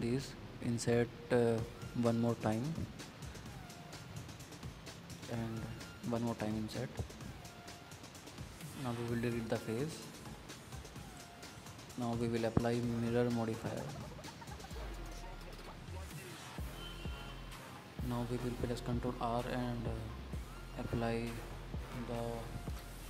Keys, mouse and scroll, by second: 0.7 middle click, 6.8-8.3 middle drag, 9.2 x, 10.4-11.9 middle drag, 12.2 scroll up 2, 12.4 middle click, 13.1 scroll down 3, 13.3-14.8 middle drag, 15.2-16.3 middle drag, 17.1-17.9 middle drag, 17.9 click, 18.1 drag, 18.3 middle click, 18.5 scroll up 2, 18.7 middle click, 19.0 Tab, 19.1 middle click, 19.6 scroll down 3, 19.7 middle click, 20.2 scroll up 3, 20.4 middle click, 21.3 click, 21.5 middle click, 21.8-22.5 scroll down 2, 22.5 ctrl+r.